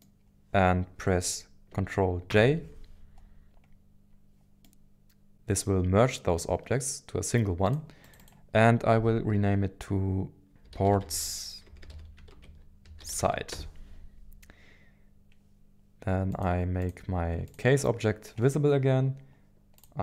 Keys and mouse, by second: 2.3 ctrl+j, 4.6 middle click, 8.0 click, 11.8 click, 11.8 BackSpace, 16.3 click, 16.8 click, 19.8 click.